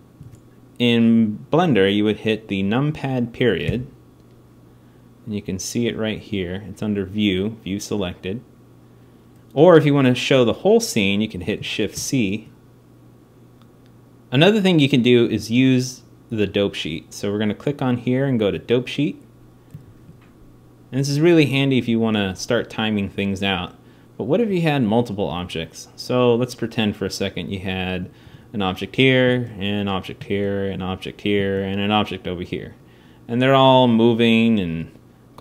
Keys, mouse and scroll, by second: 3.4 KP_Decimal, 11.7 shift+c, 13.5 x, 19.6 alt+a, 24.9 alt+a, 28.0 shift+d, 29.1 shift+d, 30.1 shift+d, 31.2 shift+d, 32.6-35.0 drag.